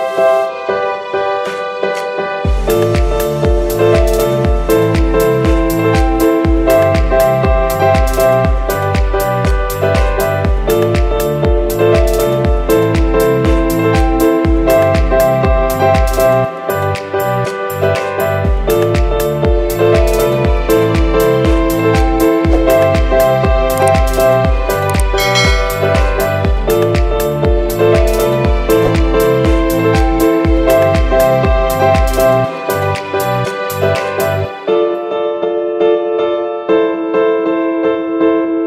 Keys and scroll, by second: 0.5-4.9 typing, 5.6 ctrl+z, 6.3-11.3 typing, 11.0 ctrl+z, 11.7 ctrl+-, 14.3-16.9 typing, 16.6 ctrl+z, 17.4 ctrl+-, 18.5 ctrl+-, 21.1 space, 21.8 space, 22.1 space, 30.0 space, 34.7 ctrl+a.